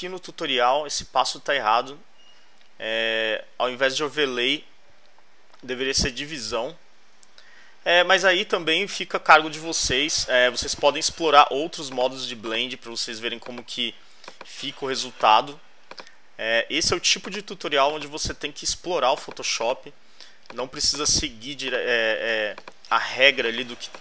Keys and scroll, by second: 9.8 alt+Right.